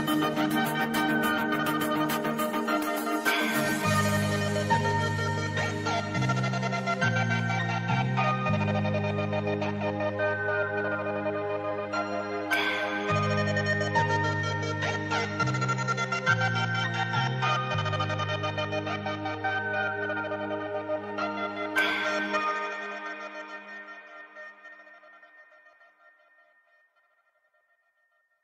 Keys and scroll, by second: 14.4 space, 17.4 space, 26.2 space.